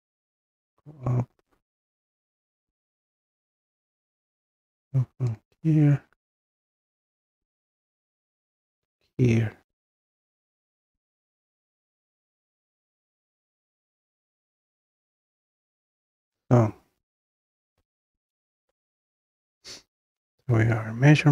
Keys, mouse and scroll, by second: 1.1 scroll, 2.4 click, 3.0-3.5 scroll down 4, 5.4 click, 6.7-7.2 scroll down 2, 8.3-8.8 scroll, 8.8 click, 10.2 scroll, 10.9-11.7 scroll, 14.3-15.9 drag, 15.9-17.9 middle drag, 15.9 scroll, 17.9-18.2 scroll, 18.2-19.2 scroll up 1, 19.2 scroll up 1, 19.4-21.3 drag.